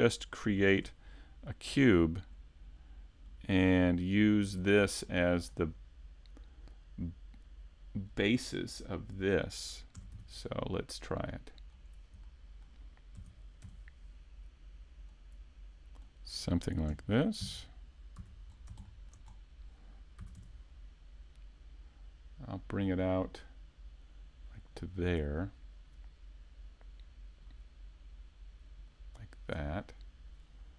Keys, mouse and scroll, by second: 0.7 shift+a, 3.3 click, 5.1 middle click, 8.1-8.5 scroll up 2, 8.4 middle click, 10.0 middle click, 11.9 click, 12.3 middle click, 13.2 s, 16.0 click, 16.9 KP_7, 17.4 KP_5, 18.2 5, 20.2 shift+middle click, 20.2-21.3 scroll down 1, 25.1 click, 27.5 click.